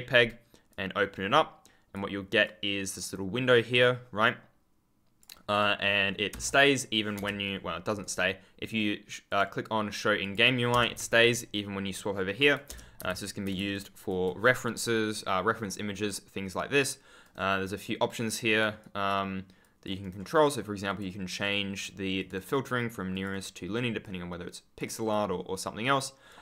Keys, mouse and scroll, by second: 0.6 click, 7.9 right click, 9.2 click, 10.9 w, 11.8 ctrl+F10, 12.0-12.6 ctrl+scroll up 1, 12.9 ctrl+space, 13.0 ctrl+s, 13.6 ctrl+click, 16.5 click, 17.1 right click, 18.4 click, 19.9 right click, 20.8 click, 21.2 right click, 22.1 click, 22.4 right click, 23.0 click, 24.9 right click, 26.2 click.